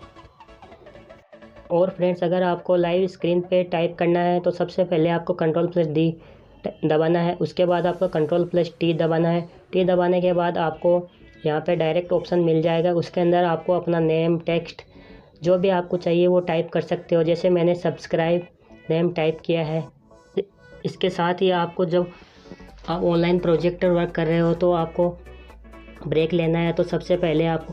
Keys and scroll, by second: 3.8 ctrl+d, 9.1 ctrl+t.